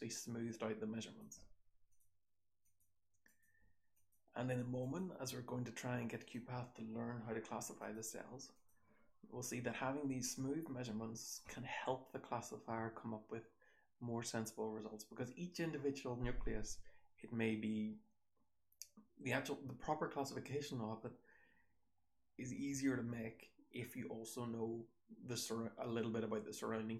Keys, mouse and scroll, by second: 9.2-12.6 scroll down 2, 10.3-11.3 drag, 12.6-18.0 scroll down 1, 18.0-21.2 scroll down 1, 21.2-23.0 scroll down 1, 23.0-26.9 scroll down 1.